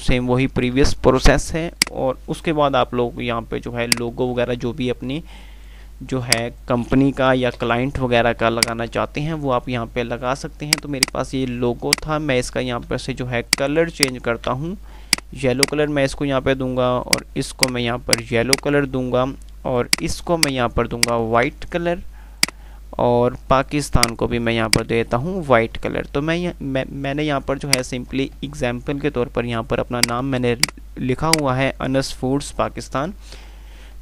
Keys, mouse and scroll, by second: 6.1 F2, 7.0 F2, 7.7 Page_Up, 8.4 F2, 8.9 click, 9.1 F2, 11.0 click, 13.7 ctrl+click, 15.3 click, 17.3 ctrl+click, 19.2 ctrl+r, 19.8 click, 20.5 ctrl+click, 22.6 click, 24.0 ctrl+click, 25.3 ctrl+r, 26.0 F3, 30.1 click, 31.5-32.2 click, 32.7 Up.